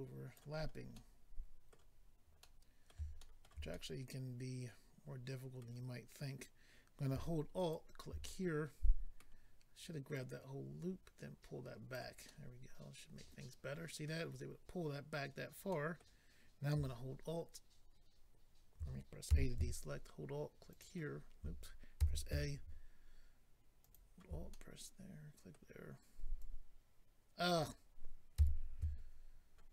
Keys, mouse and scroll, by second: 0.6-0.9 scroll down 2, 0.9 middle click, 1.9 scroll down 2, 2.4 middle click, 3.2 shift+middle click, 3.7 middle click, 7.7 alt+click, 8.2 middle click, 10.1 click, 12.2 middle click, 15.7 middle click, 19.3 alt+a, 20.7 alt+click, 22.0 a, 23.8 alt+click, 24.5 middle click, 26.4 click, 27.5 right click, 27.6 click, 28.3 a.